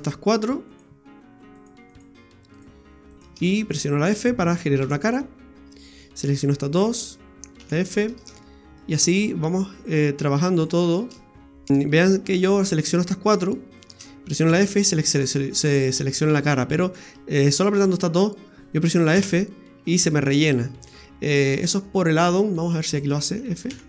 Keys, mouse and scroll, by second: 0.3 right click, 0.7 right click, 1.5 shift+right click, 3.3 shift+right click, 4.8 f, 6.1 right click, 6.6 shift+right click, 7.6 f, 7.9-8.3 scroll down 2, 8.4 shift+middle click, 9.7 right click, 10.5 shift+right click, 11.7 shift+middle click, 11.7 scroll down 2, 12.3 right click, 12.7 shift+right click, 13.3 shift+right click, 13.8 shift+right click, 14.5 f, 15.3-15.6 scroll up 3, 16.1 shift+middle click, 16.8 right click, 17.4 shift+right click, 19.2 f, 20.7 scroll down 1, 21.0 shift+middle click, 22.5 shift+right click, 22.9 shift+right click, 23.7 f.